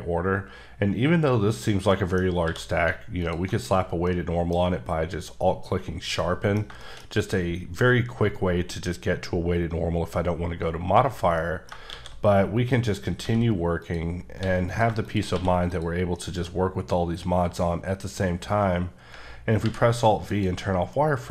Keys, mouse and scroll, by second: 1.9 middle click, 2.2 scroll down 1, 2.5 q, 3.2 alt+click, 4.1 middle click, 7.1 scroll up 1, 7.7-8.9 scroll up 1, 11.4 scroll up 2, 11.4 middle click, 11.9 shift+a, 12.7 click, 13.2 s, 13.8 click, 14.4 s, 14.7 click, 15.3 q, 15.7 click, 16.1 middle click, 17.0 scroll up 2, 19.6 alt+scroll up 1, 19.7 alt+v, 20.3 click, 20.6-21.0 scroll down 3, 21.0 middle click.